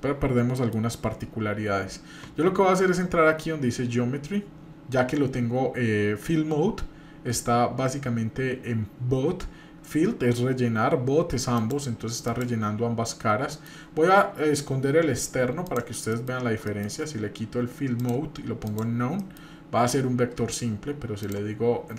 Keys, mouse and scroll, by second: 0.6 middle click, 11.5 click, 13.6 middle drag, 15.6 click, 16.1 middle click, 16.4 scroll up 1, 16.6 middle click, 18.0-18.8 drag, 19.2 middle click, 21.2-21.9 drag.